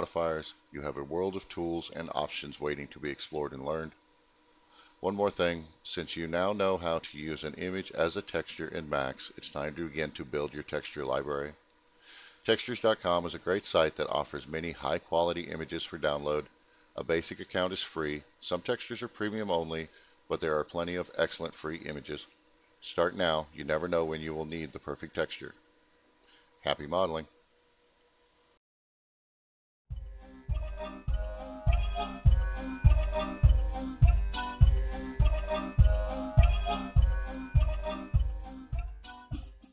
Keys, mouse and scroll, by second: 7.8 click, 10.1 click, 13.1 click, 16.7-17.6 scroll down 2, 20.9-22.0 scroll down 2, 22.4-22.8 scroll up 2.